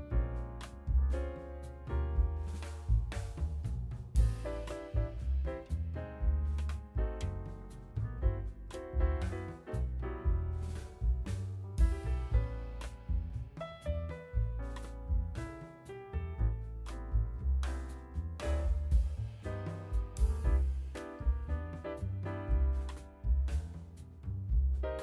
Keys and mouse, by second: 0.0 Delete, 1.1 k, 6.0 Delete, 6.0-11.6 middle drag, 8.4 k, 11.6 click, 11.7 Delete, 11.7-25.0 middle drag, 14.9 k, 17.7 Delete, 19.2 k, 23.0 k.